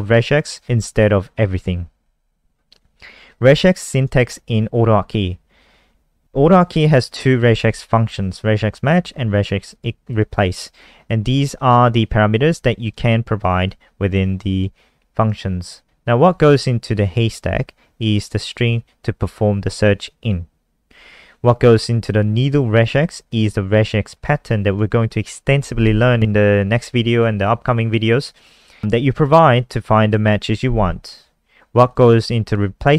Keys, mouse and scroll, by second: 2.2 scroll down 2, 3.3 click, 4.4 scroll down 1, 5.1 scroll down 1, 6.2 click, 9.7 click, 10.1 click, 11.8 click, 17.3 click, 18.7 click, 21.2 scroll down 1, 24.0 click, 32.0 click.